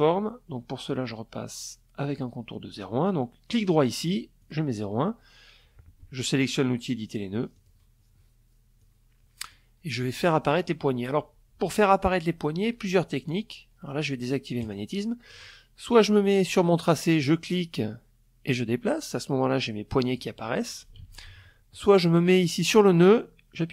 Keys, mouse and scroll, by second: 1.2 click, 2.2 click, 2.9 click, 6.1 click, 7.3 click, 13.1 click, 15.7-18.9 drag, 19.5 ctrl+z, 20.5 click.